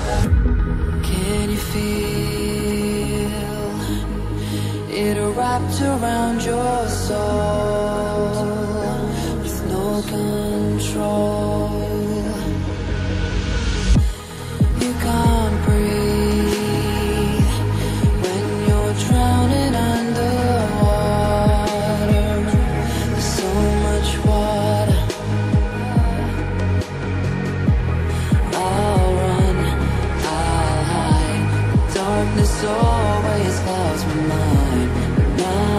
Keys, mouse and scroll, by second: 0.7 click, 2.3 double click, 3.7 ctrl+c, 3.8 ctrl+v, 4.6 click, 6.3 click, 6.6 double click, 7.7 click, 9.4 click, 9.9 double click, 10.2 scroll up 1, 10.6 scroll down 1, 11.3 click, 14.7-15.3 scroll up 1, 15.3 scroll down 1, 16.6 click, 17.2 scroll up 1, 18.7 click, 21.8 Down, 22.7 Down, 24.6 click, 27.0 click, 27.2 double click, 29.9 Down, 31.4 click, 33.8 scroll down 1, 35.4-35.7 scroll up 1.